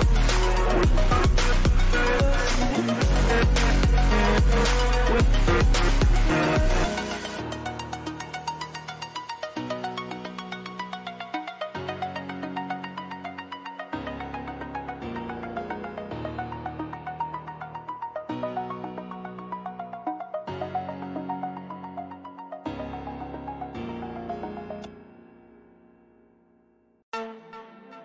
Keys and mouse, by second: 0.1 ctrl+v, 3.4-6.4 drag, 6.4 ctrl+=, 8.3 ctrl+t, 10.7-18.8 drag, 21.3 right click, 24.7 click, 26.9 ctrl+t.